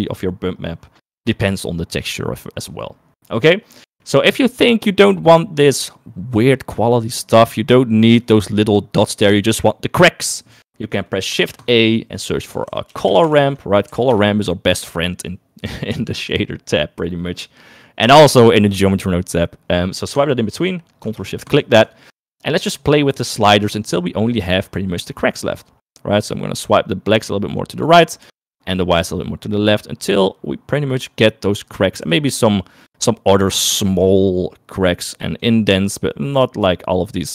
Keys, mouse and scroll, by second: 1.2 middle click, 3.4 middle click, 11.5 shift+a, 21.5 ctrl+shift+click, 25.9-27.9 drag, 28.6-31.9 drag, 32.4-34.4 drag, 35.2 click, 36.2-37.3 drag.